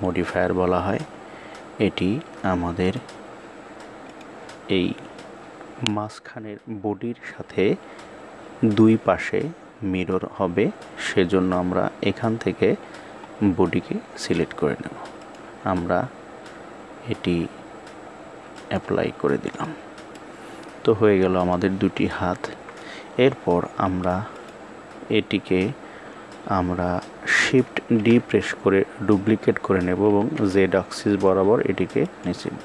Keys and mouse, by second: 2.7 click, 15.1-18.6 drag, 19.4 click, 20.0-21.4 middle drag, 22.3 KP_1, 24.2 click, 27.8 shift+d.